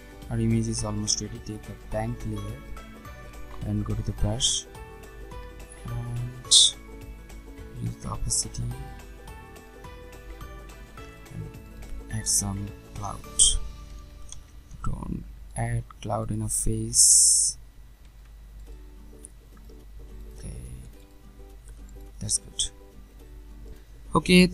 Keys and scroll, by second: 13.9 ctrl+alt+z.